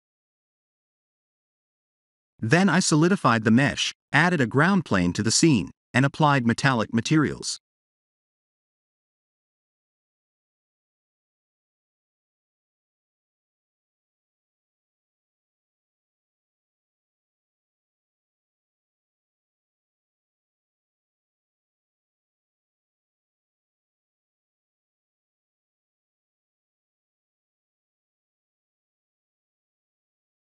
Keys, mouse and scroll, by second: 1.4 Tab, 2.1 ctrl+3, 2.6 middle click, 5.2 click, 8.0 click, 11.8 click, 12.2 Tab, 12.7 Tab, 13.0 middle click, 17.0 click, 18.4 click, 19.3 click, 21.8 click, 22.5 click, 22.9 middle click, 24.5 click, 25.9 click, 27.1 g, 29.4-30.2 scroll down 2, 30.2 scroll down 1, 30.2 shift+a.